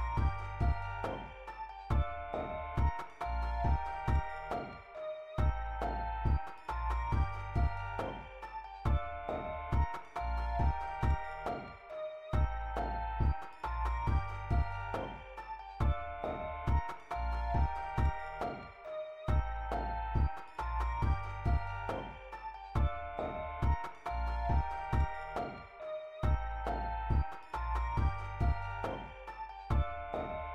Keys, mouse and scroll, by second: 3.4-5.0 scroll down 7, 5.8 click, 6.2 click, 6.7 scroll down 2, 6.8-7.4 scroll up 2, 7.5-8.8 scroll down 10, 9.3 scroll down 2, 9.7-10.2 scroll up 3, 11.0 click, 12.0 click, 12.8-13.6 scroll down 4, 14.1-14.7 scroll up 6, 17.1 scroll down 2, 17.3 scroll up 2, 17.7 click, 22.2 click, 24.2 click, 24.7 click, 26.0 click, 27.0 click, 28.0 click, 28.7 click, 29.8 scroll down 1, 30.0 click.